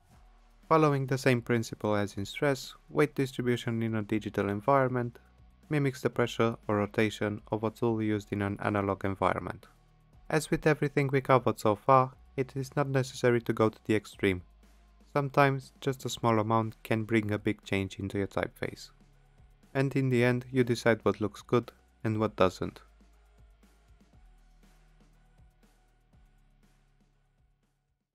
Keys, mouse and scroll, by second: 11.5 click, 13.8 click, 15.5 click, 17.2 click, 18.1 double click.